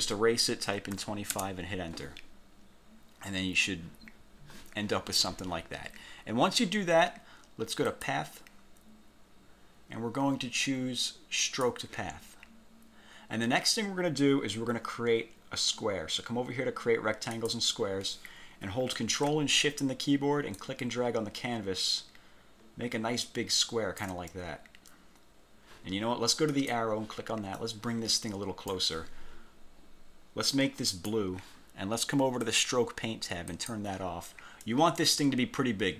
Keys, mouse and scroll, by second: 0.8 2, 1.1 5, 1.5 Return, 8.0 click, 11.6 click, 17.5 click, 20.7-24.3 ctrl+shift+drag, 26.6 click, 27.7-29.0 drag, 31.0 click, 32.6 click, 33.6 click, 34.8-35.9 drag.